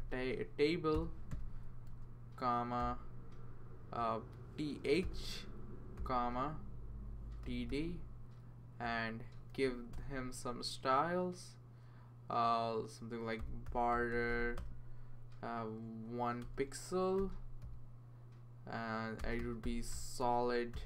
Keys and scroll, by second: 0.0-3.3 typing, 4.6-6.0 typing, 7.2-8.2 typing, 9.3-10.0 typing, 11.7 typing, 13.1-14.8 typing, 16.4-18.1 typing, 19.1-20.8 typing.